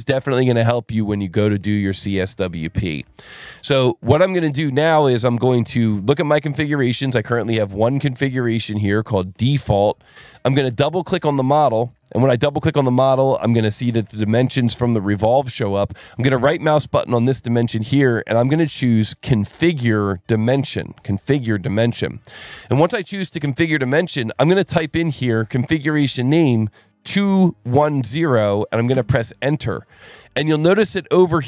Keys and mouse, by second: 0.1 click, 0.9 click, 2.2 click, 4.1 click, 6.8 alt+1, 7.2 click, 8.0 right click, 8.7 click, 9.5 ctrl+shift+click, 10.1 alt+1, 11.8 click, 13.4 click, 17.0 right click, 21.7 click, 25.1 click, 27.3 KP_2, 27.6 KP_1, 27.9 KP_0, 28.9 KP_Enter, 31.2 click.